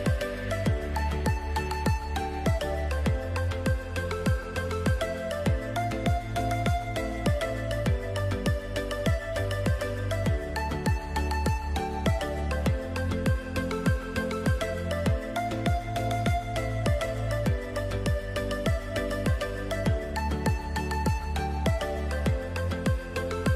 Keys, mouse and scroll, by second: 9.4 click, 11.4 alt+scroll up 1, 12.4 alt+scroll down 1, 13.2 click, 14.1 ctrl+z, 14.8 click, 19.4-22.1 alt+scroll down 4, 22.2 click.